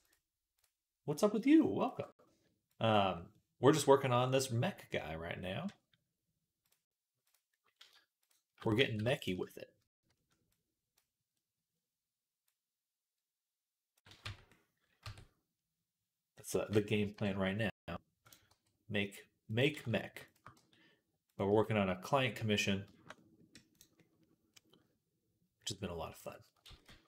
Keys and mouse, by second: 0.4 click, 0.4 middle click, 0.9 click, 0.9 middle click, 1.6 alt+shift+click, 1.6 alt+shift+middle click, 2.6-3.6 drag, 2.6-3.6 middle drag, 4.1-7.2 drag, 4.1-7.2 middle drag, 4.1-7.8 right drag, 8.1 shift+click, 8.1 shift+right click, 8.7 ctrl+z, 9.0 click, 9.0 right click, 10.4-14.1 drag, 10.4-14.1 right drag, 14.1 Tab, 14.9 Tab, 17.0 KP_3, 17.9 click, 17.9-21.7 right drag, 18.3 g, 19.6 ctrl+z, 20.1 shift+click, 20.4 g, 21.3 z, 21.7-23.8 middle drag, 23.8-27.0 right drag, 26.5 ctrl+z, 26.7 ctrl+z.